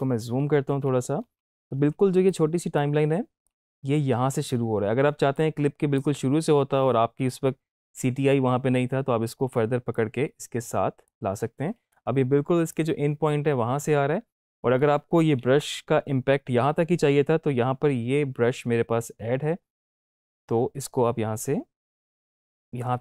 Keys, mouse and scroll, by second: 0.4-0.8 typing, 2.2 typing, 2.3-4.4 drag, 3.7 typing, 5.3-5.9 drag, 9.8-11.1 drag, 15.9 -, 21.8-23.0 drag.